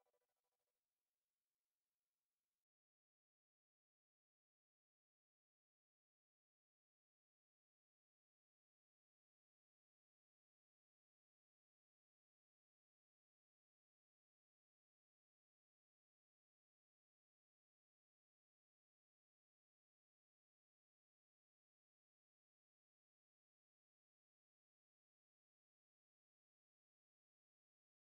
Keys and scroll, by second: 3.1 x, 4.1 [, 8.4 ctrl+-, 11.0 ctrl+=, 12.3 ctrl+-, 13.1 ctrl+=, 13.9 ctrl+-, 14.9 space, 16.7 ctrl+=, 17.4 space, 22.2 ctrl+alt+z, 25.8 space.